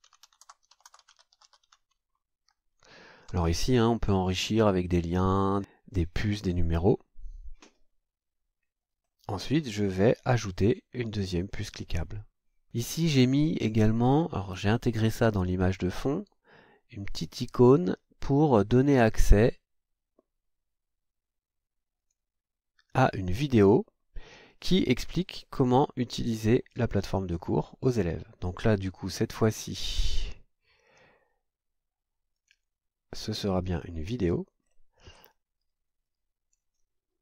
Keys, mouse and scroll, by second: 0.0-2.2 typing, 3.3 shift+;, 9.0-10.2 scroll down 6, 11.4 click, 22.0 click, 23.5 scroll down 2, 29.7-30.1 scroll down 2, 32.3 click, 33.6 click, 34.6-35.3 scroll down 4, 36.0 click.